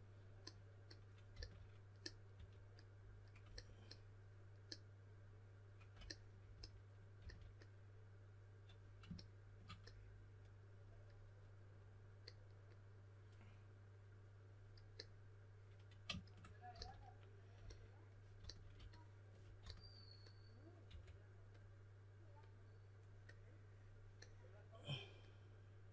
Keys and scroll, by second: 1.3-2.8 typing, 7.1 s, 16.7 s, 18.3 s, 19.6-21.3 typing.